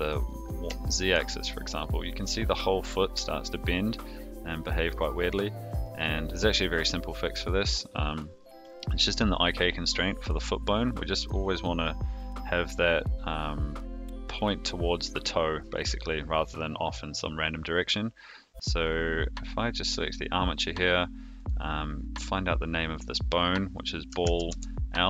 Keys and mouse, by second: 0.8 shift+middle drag, 1.4-4.9 middle drag, 5.8 click, 21.3 click, 23.0 drag, 23.7-25.0 drag.